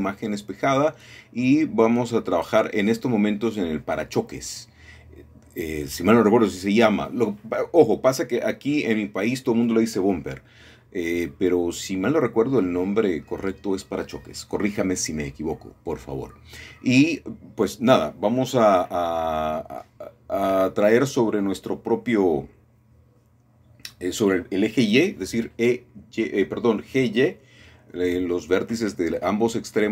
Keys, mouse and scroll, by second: 4.2-4.9 scroll down 2, 5.3 middle click, 6.5 middle click, 6.9 scroll up 1, 8.0 shift+middle click, 8.7-9.8 drag, 10.0 shift+click, 10.5-11.6 scroll down 1, 11.1 middle click, 11.7 shift+middle click, 12.7 shift+middle click, 15.5-16.6 drag, 16.9-17.9 scroll up 1, 18.2 ctrl+r, 18.7 click, 21.2 shift+click, 22.7 middle click, 25.7 middle click, 26.0-26.7 scroll down 2, 27.6 middle click, 27.9-29.1 middle drag, 29.2 middle click, 29.7 shift+middle click.